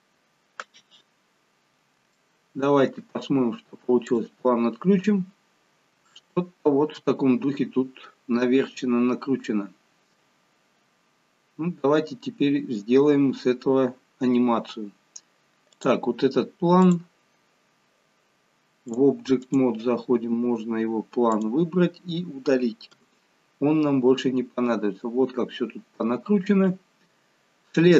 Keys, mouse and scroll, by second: 1.2-1.8 scroll down 4, 2.1 shift+middle click, 4.1 click, 5.0 scroll up 1, 6.1 shift+middle click, 11.3-13.1 scroll down 1, 15.7 click, 16.9 click, 18.9 click, 21.3 click, 23.0 Delete.